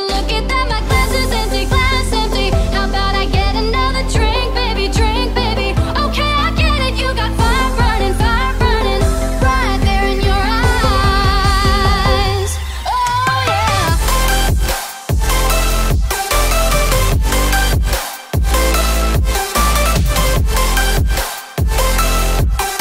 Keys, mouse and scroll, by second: 0.1-1.3 alt+scroll up 2, 2.9 click, 6.6-8.4 alt+drag, 8.4 right click, 9.8 click, 11.8 click, 12.9-13.5 alt+scroll up 1, 14.0 v, 14.2 click, 16.4 alt+click, 17.4-19.4 alt+shift+drag.